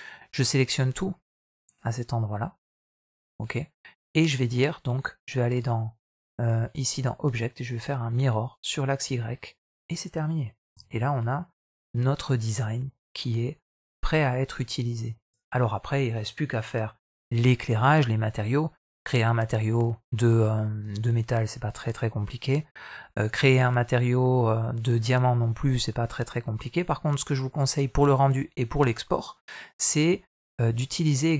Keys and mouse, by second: 0.9 click, 1.4-2.7 right drag, 6.5 click, 7.5-9.3 drag, 10.6 alt+a, 10.9-14.7 middle drag.